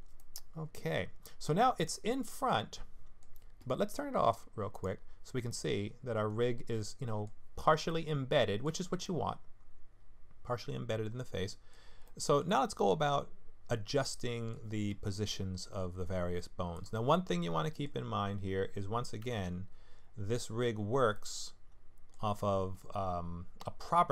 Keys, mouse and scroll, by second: 0.2 middle click, 1.7-2.2 scroll down 2, 2.2 middle click, 4.7 click, 5.5 middle click, 7.9 middle click, 9.0 middle click, 12.4 middle click, 14.0 middle click, 16.7 click, 17.7 middle click, 19.2 Tab, 21.1 middle click.